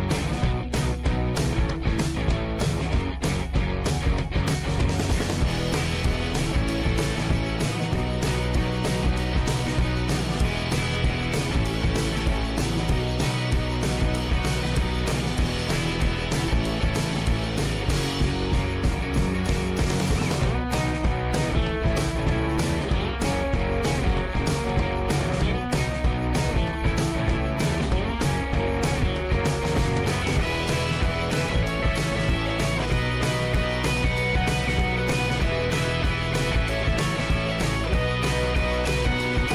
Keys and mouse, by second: 0.1 Tab, 0.5 middle click, 1.1 shift+middle click, 1.4 middle click, 2.1 shift+middle click, 2.8 click, 3.2 shift+middle click, 3.5 middle click, 4.2 shift+middle click, 4.6 Tab, 5.3 shift+middle click, 6.4 shift+middle click, 8.0 2, 10.5 x, 12.7 2, 14.1 3, 15.5 h, 17.2 ctrl+r, 20.1 shift+middle click, 21.7 alt+h, 23.0 Tab, 23.8 middle click, 24.1-26.5 middle drag, 27.3 Tab, 28.0 shift+middle click, 28.6 1, 29.2 shift+middle click, 29.9 shift+middle click, 30.8 shift+middle click, 31.2 middle click, 32.5 k, 35.4 shift+middle click, 36.4 k, 39.2 shift+middle click.